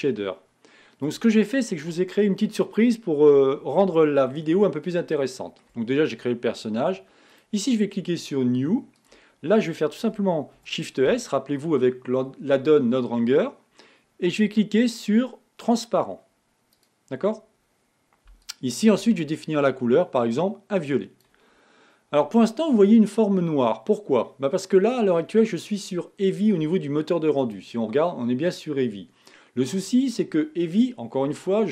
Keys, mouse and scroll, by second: 0.3-5.0 drag, 5.0 shift+middle click, 5.9-7.8 scroll up 1, 7.8-9.3 drag, 20.1 click, 23.2-31.7 middle drag.